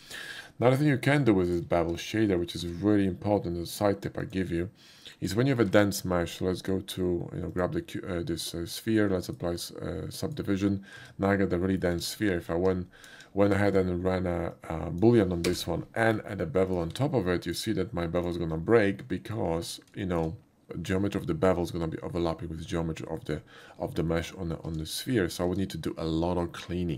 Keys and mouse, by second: 0.0 middle click, 0.9 middle click, 1.4 shift+click, 1.8 x, 2.0 click, 4.2 click, 7.5 click, 8.4 ctrl+2, 9.2 click, 10.2 click, 11.3 Tab, 11.6 middle click, 12.4 alt+Tab, 12.4 middle click, 13.1 KP_5, 13.6 middle drag, 14.5 click, 15.5 space, 16.0 middle drag, 16.7 click, 16.8 q, 17.5 click, 18.1 click, 18.7-19.3 middle drag, 19.9 shift+middle click, 20.5 shift+middle click, 20.6 z, 23.2 right click, 24.1 middle click.